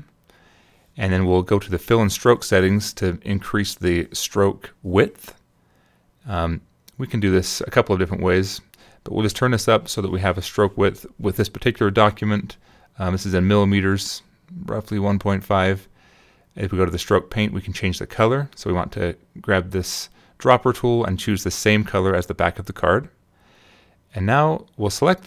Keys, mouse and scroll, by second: 2.5 click, 9.5 click, 10.0 click, 12.6 click, 12.9 click, 13.5 click, 14.1 click, 15.9 click, 20.8 click, 21.9 click, 23.7 click, 25.1 click.